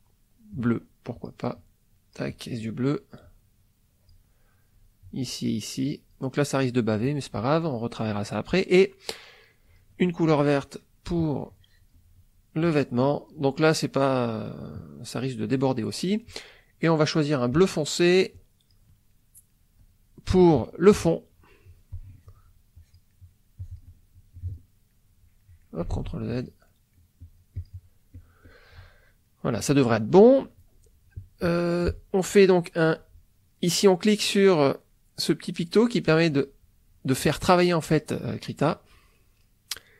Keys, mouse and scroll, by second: 0.6 click, 1.6 click, 3.2-4.3 drag, 5.0-6.3 drag, 9.7 click, 10.3 middle click, 11.2 click, 12.6 click, 17.6 click, 18.4 click, 19.1 middle click, 20.3 KP_Subtract, 21.1 middle click, 21.9 click, 22.8 click, 23.1 middle click, 23.6 click, 24.4 click, 24.9 middle click, 25.4 middle click, 25.9 ctrl+z, 26.3 ctrl+click, 26.7 ctrl+middle click, 27.2 ctrl+click, 28.2 click, 28.8 middle click, 36.3 click, 38.2 middle click, 39.2 middle click.